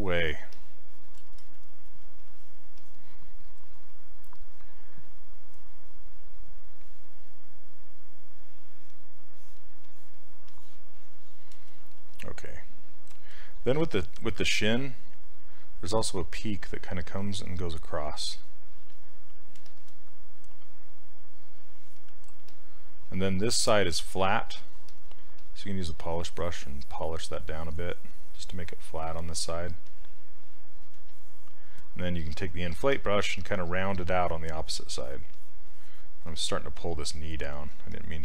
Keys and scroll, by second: 33.4 s.